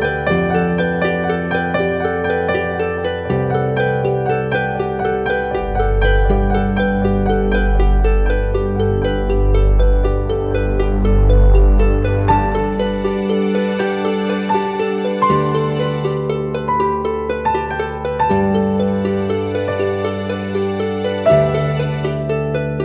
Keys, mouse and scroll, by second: 3.5 right click, 5.2 double click, 6.2-7.5 typing, 6.9 double click, 7.8 double click, 11.8 right click, 13.9 ], 14.1 ], 16.4 double click.